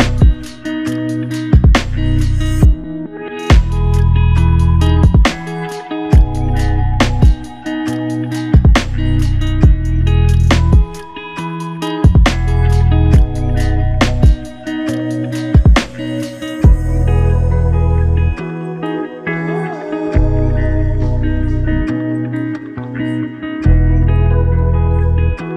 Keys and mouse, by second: 0.5 ctrl+click, 0.7 shift+click, 4.8 double click, 8.8 shift+click, 11.2 shift+click, 13.3 shift+click, 16.0 alt+click, 17.0 alt+click, 19.3 shift+double click, 19.8 shift+click.